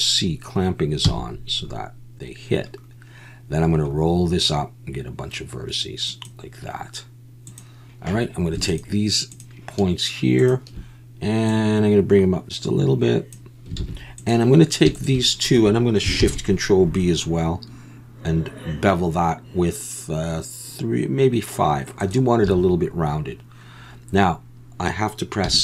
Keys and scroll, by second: 1.0 c, 13.8 alt+a, 16.2 ctrl+shift+b, 22.5 a, 25.4 m.